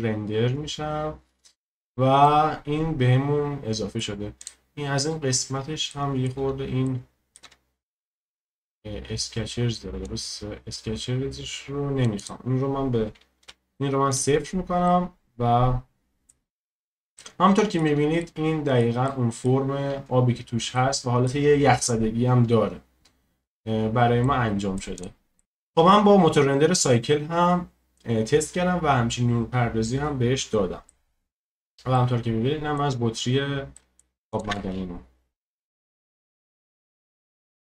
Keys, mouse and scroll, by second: 0.0 click, 1.0-2.2 scroll up 1, 2.2-4.5 middle drag, 4.5 click, 11.9-14.9 drag, 14.9-16.5 middle drag, 16.5-17.2 scroll up 1, 17.2-20.3 shift+middle drag, 20.3-20.8 scroll up 2, 20.8-22.5 middle drag, 22.5-24.3 scroll down 2, 24.3 middle click, 25.0-30.6 drag, 25.4 shift+middle click, 30.6 scroll down 1, 30.9-34.4 middle drag, 34.4 click, 34.5 space, 35.5 space.